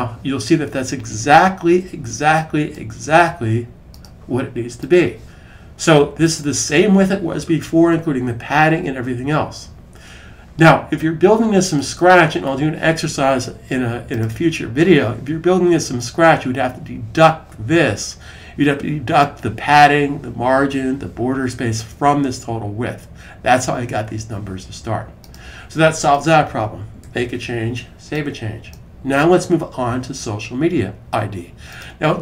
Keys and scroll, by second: 9.1 super+s, 26.8 super+s.